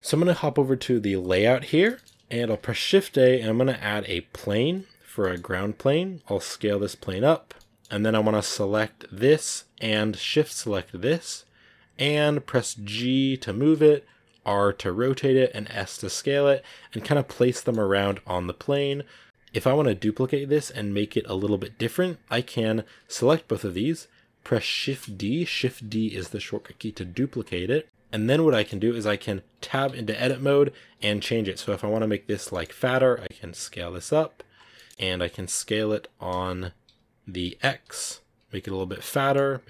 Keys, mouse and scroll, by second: 1.1 click, 1.4 scroll down 3, 1.6-4.3 shift+middle drag, 4.3 shift+a, 4.5 scroll down 1, 4.8 scroll up 3, 5.1 middle click, 5.4-5.9 scroll up 2, 5.9 s, 7.4-9.1 middle drag, 9.1 right click, 9.4 middle click, 9.9-10.9 scroll up 1, 11.2-12.8 scroll down 4, 12.9 g, 14.4 r, 15.8 s, 16.4 r, 17.6 middle click, 17.6 scroll up 3, 18.2 g, 18.9 r, 19.2 g, 19.2 x, 21.7-27.8 right drag, 27.8 KP_Decimal, 27.8 z, 28.4 middle click, 29.2 right click, 29.7 Tab, 29.9 middle click, 30.4-31.0 scroll down 1, 31.0-32.4 alt+right drag, 32.4 middle click, 32.9 s, 34.6-39.6 middle drag.